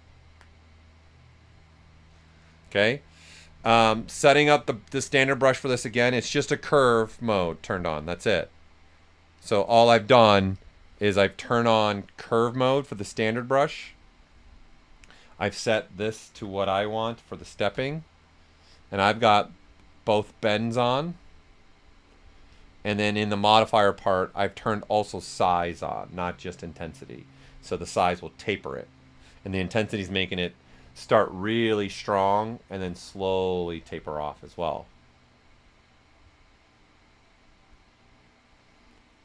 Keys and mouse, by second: 3.7-5.7 drag, 5.7-8.3 drag, 7.2 typing, 8.3 right click, 9.3 click, 14.8 click, 16.3-17.5 typing, 17.6 Return, 19.4 typing, 22.5 click, 22.5 typing.